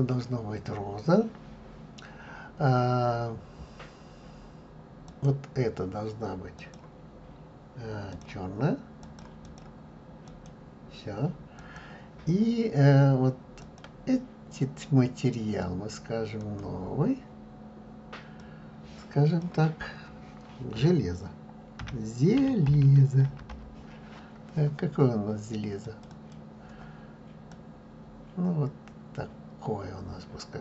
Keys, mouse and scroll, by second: 8.0 click, 10.5-11.9 drag, 16.5-27.6 drag.